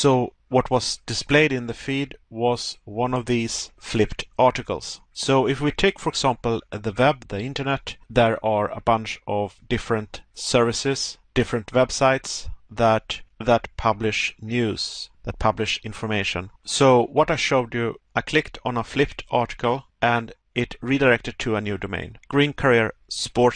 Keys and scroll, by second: 3.4 Pause, 5.0 Pause, 7.8 Pause, 10.8 Pause, 12.8 Pause.